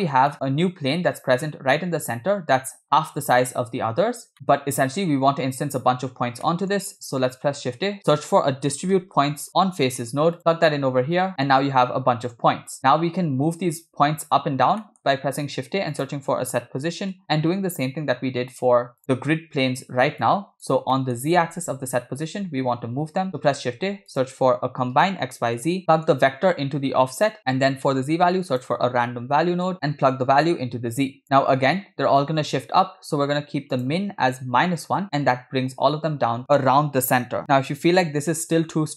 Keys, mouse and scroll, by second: 0.1 scroll down 3, 0.3 middle click, 1.3 scroll down 1, 1.8-3.1 middle drag, 3.2-3.6 scroll down 2, 4.4 KP_0, 6.5 middle click, 7.5 shift+a, 11.2 click, 11.3 middle click, 11.8-12.3 scroll up 2, 12.3 click, 14.8 middle click, 15.2 shift+a, 20.3 click, 21.0 middle click, 23.4 shift+a, 25.9 click, 25.9 middle click, 27.4 middle click, 27.9 shift+a, 30.5-31.2 drag, 33.3-33.7 scroll up 3, 33.8-35.0 drag.